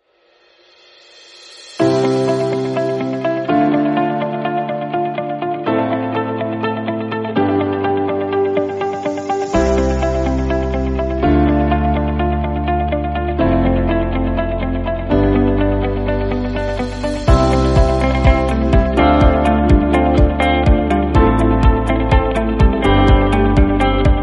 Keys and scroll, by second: 2.0 alt+shift+Delete, 4.3 alt+Delete, 4.4 ctrl+d, 7.5 ctrl+f, 13.8 ctrl+j, 16.5 ctrl+j, 20.4 ctrl+u, 22.0 ctrl+u, 23.8 ctrl+j.